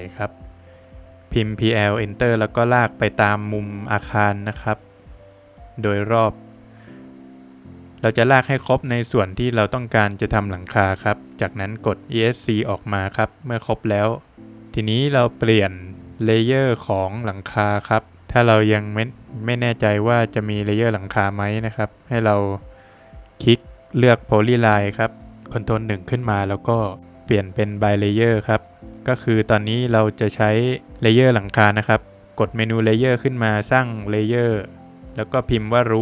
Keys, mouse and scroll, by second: 0.5 click, 0.7 scroll down 3, 0.9 middle click, 1.7 scroll up 1, 2.8 click, 2.8 scroll up 1, 3.1 scroll down 2, 3.3 middle click, 4.7 click, 4.9 scroll down 2, 5.1 middle click, 5.5 scroll down 1, 5.6 middle click, 5.7-6.2 scroll up 2, 7.0 click, 7.2 scroll down 2, 7.4 middle click, 8.0 scroll up 1, 9.4 click, 9.6 scroll down 3, 10.3 middle click, 10.9 scroll up 1, 12.2 scroll up 1, 12.3 click, 12.5 space, 12.9 Escape, 14.4 click, 15.0 middle click, 16.4 click, 17.3 scroll up 2, 19.6 scroll, 19.7 click, 22.1 Escape, 22.8 click, 23.1 Escape, 23.5 click, 25.4 Escape, 25.8 Escape, 26.5 ctrl+1, 27.2 ctrl+1, 27.3 click, 28.9 Escape, 30.0 click, 32.2 click, 35.9 click.